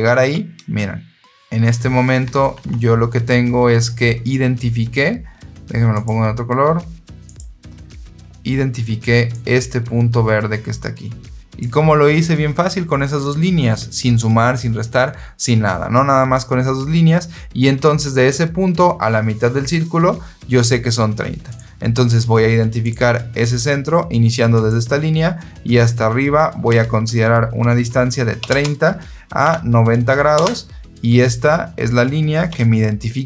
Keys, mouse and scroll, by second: 2.4 alt+Tab, 5.8 click, 7.1 click, 9.2-11.5 drag, 21.4 click, 22.7 click, 24.4 click, 28.3 KP_3, 28.5 KP_0, 29.3 Tab, 30.2 Return, 32.4 Escape.